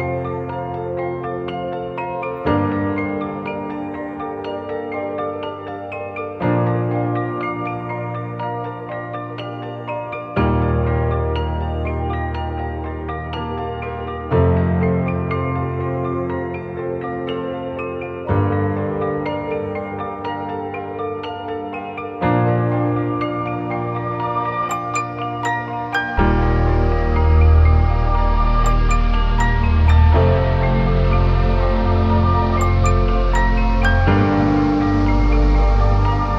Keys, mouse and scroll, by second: 0.0 click, 0.1 right click, 0.8 alt+a, 0.9-1.3 scroll up 2, 1.1 shift+middle click, 1.3 middle click, 1.5 scroll down 2, 1.6 shift+middle click, 1.7 scroll up 2, 1.8 click, 2.0 Tab, 2.2 click, 2.5 click, 3.7 click, 4.0 click, 5.9-6.4 scroll up 3, 6.0 middle click, 6.4 click, 6.6 click, 7.4 click, 7.6 click, 8.7 click, 9.0 click, 9.7 click, 10.0 click, 10.5 click, 10.8 click, 11.8 scroll down 1, 12.3 Tab, 12.3-12.7 scroll down 6, 12.5 alt+a, 12.6 scroll up 4, 12.7 middle click, 13.4 scroll down 2, 13.5 shift+middle click, 13.6 scroll up 2, 13.7 middle click, 13.8 click, 14.0 shift+middle click, 14.2 click, 15.5 middle click, 15.8 click, 17.9 click, 18.7 scroll down 2, 18.8 shift+middle click, 18.9 scroll up 1, 19.0 middle click, 19.1 scroll down 1, 19.2 click, 19.4 click, 19.9 h, 21.1 alt+a, 21.1 middle click, 21.6 click, 21.7 middle click, 21.9 scroll down 4, 22.0 shift+middle click, 22.1 scroll up 3, 22.4 Tab, 23.0 ctrl+right click, 23.9 alt+z, 24.2 click, 28.6 scroll down 3, 28.7 alt+a, 28.9 middle click, 28.9-29.4 scroll up 1, 29.6 scroll up 1, 29.8 scroll down 1, 29.9 shift+middle click, 29.9 scroll down 1, 30.0 scroll up 1, 30.1 middle click, 30.7 click, 31.2-31.6 scroll down 5, 31.3 alt+a, 31.5 shift+middle click, 31.6 scroll up 4, 31.8 middle click, 31.9-32.2 scroll down 1, 32.7 click.